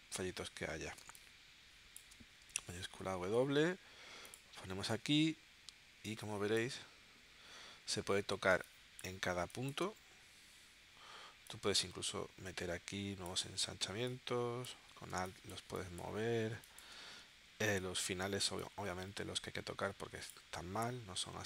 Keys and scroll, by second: 1.0 space, 2.7 shift+w, 8.6 space, 15.1 space.